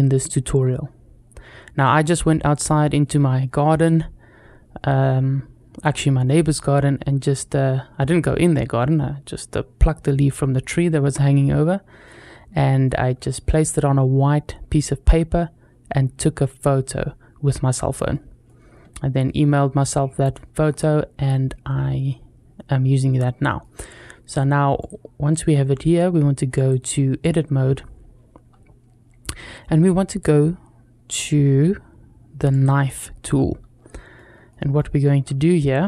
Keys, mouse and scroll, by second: 1.6-1.9 scroll up 1, 2.1-2.5 shift+middle drag, 11.8-12.7 shift+middle drag, 17.9-18.3 shift+middle drag, 20.1-20.5 shift+middle drag, 22.8-23.4 shift+middle drag, 24.1 click, 24.6 click, 26.4-27.2 drag, 32.3 click, 33.6 scroll up 2, 34.0 shift+middle click, 34.6 shift+middle click, 35.1-35.5 scroll up 1, 35.8 shift+middle click.